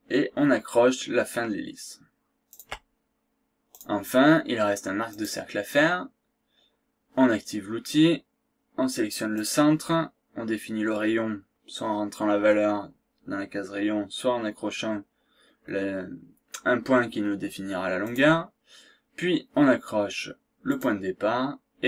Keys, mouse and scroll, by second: 2.5 shift+click, 3.8 click, 5.2 click, 9.4 click, 18.0 click, 20.7 click.